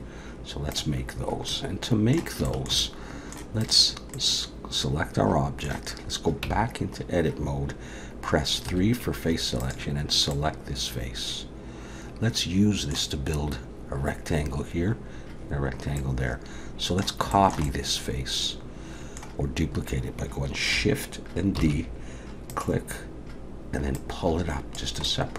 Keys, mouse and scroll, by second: 1.5 middle click, 2.4 shift+middle click, 2.8 middle click, 3.6 click, 4.1 middle click, 6.4 Tab, 8.7 3, 9.6 click, 10.3 middle click, 16.0 middle click, 17.3 shift+middle click, 17.7 middle click, 21.6 shift+d, 23.9 click, 25.0 middle click.